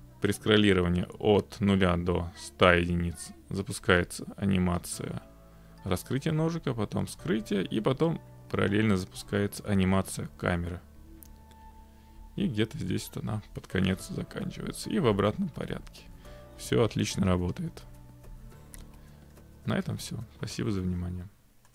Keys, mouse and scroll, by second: 0.0-1.4 scroll, 3.8-4.3 scroll, 4.8-5.8 scroll, 6.6-8.0 scroll, 8.0 scroll, 8.6-9.2 scroll, 9.2-12.2 scroll, 12.2 middle click, 12.3 middle click, 12.4 middle click, 12.5-13.7 middle click, 12.8 middle click, 12.9 middle click, 12.9 middle click, 13.3 middle click, 13.4 middle click, 13.5 middle click, 14.0-19.0 scroll, 18.3 middle click, 19.0 middle click, 19.5-20.1 scroll.